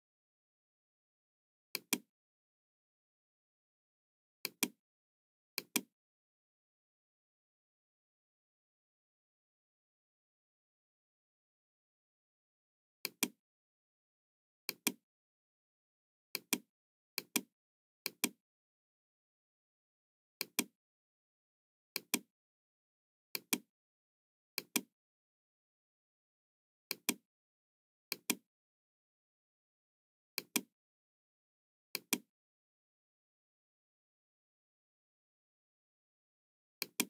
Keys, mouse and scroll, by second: 1.6 click, 4.4 click, 5.4 click, 6.8-7.7 scroll up 2, 8.1-8.4 scroll down 1, 8.8-9.1 scroll down 1, 9.5 scroll down 1, 10.8 middle click, 12.9 click, 14.5 click, 16.3 click, 17.1 click, 18.0 click, 20.4 click, 21.8 click, 23.2 click, 24.4 click, 25.3 scroll down 1, 26.9 click, 28.0 click, 30.2 click, 31.8 click, 36.7 click.